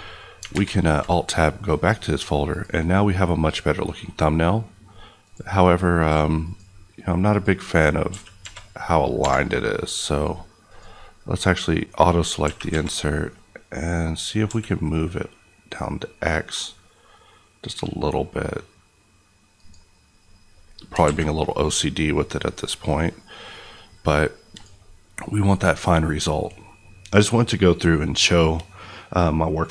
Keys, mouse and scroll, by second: 0.5 Tab, 2.5 click, 8.1 g, 8.4 y, 9.2 Escape, 10.7 click, 12.4 g, 12.6 y, 14.5 x, 19.6 click, 21.2 a, 22.5 click, 24.5 click.